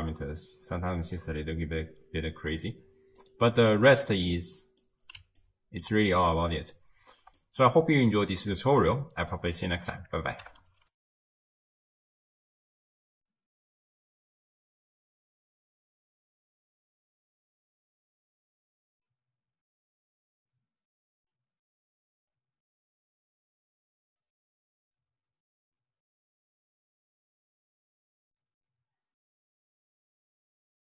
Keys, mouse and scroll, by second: 2.2-2.7 scroll down 2, 2.7-3.2 scroll down 1, 3.2 click, 4.3 click, 4.8-11.0 middle drag, 11.0 ctrl+alt+shift+w.